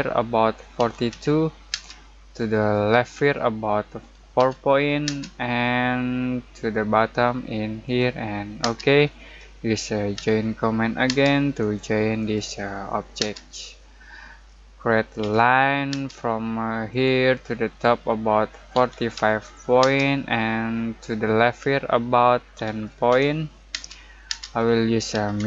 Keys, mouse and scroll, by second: 0.7-1.7 typing, 4.3 4, 5.0 space, 7.8 click, 8.6 space, 10.1 j, 11.1 space, 11.6 click, 13.2 space, 13.6-15.2 middle drag, 15.2 l, 15.9 space, 16.9 click, 18.5-19.8 typing, 22.5-23.7 typing, 24.6 middle click, 24.9-25.4 typing.